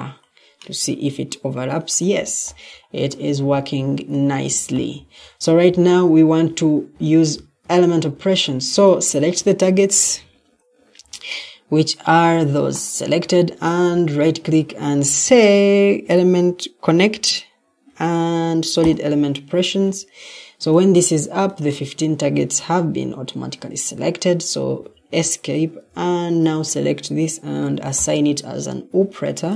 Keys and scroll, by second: 0.7 typing, 7.5 Escape, 8.0 Escape, 24.7 Escape.